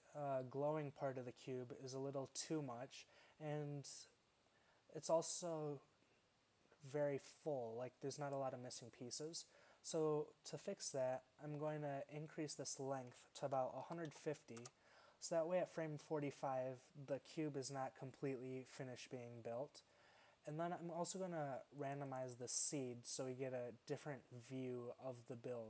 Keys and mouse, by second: 9.5-11.3 drag.